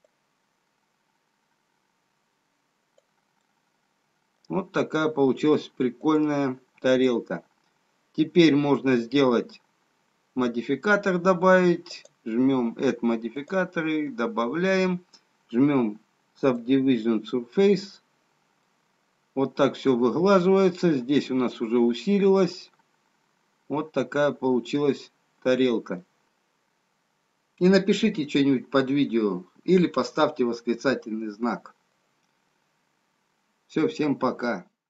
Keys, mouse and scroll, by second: 0.4 click, 3.8 middle click, 5.0-6.8 scroll down 2, 6.8 click, 7.1 click, 12.3 click, 13.9 click, 18.8 middle click.